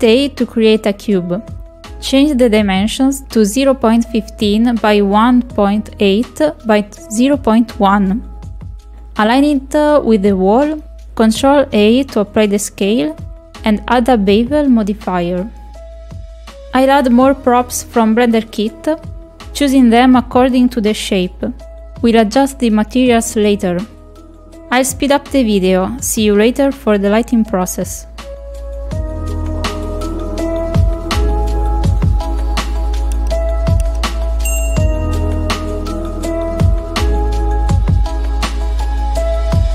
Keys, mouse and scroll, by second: 0.4 shift+click, 2.1 shift+a, 3.9 click, 4.6 click, 4.9 click, 5.9 click, 6.8 click, 7.6 middle click, 8.2 shift+middle click, 8.9 ctrl+click, 9.6 middle click, 10.1-12.0 drag, 12.4 click, 14.3 click, 16.0 ctrl+a, 16.8 middle click, 17.7 click, 18.6 click, 24.1 click, 25.3 click, 28.9 click, 29.3 s, 31.9 r, 34.8 KP_7, 35.6 shift+middle click, 36.0 click, 36.4 ctrl+click, 37.0 shift+middle click, 37.7 ctrl+click, 38.2 click, 39.3 click.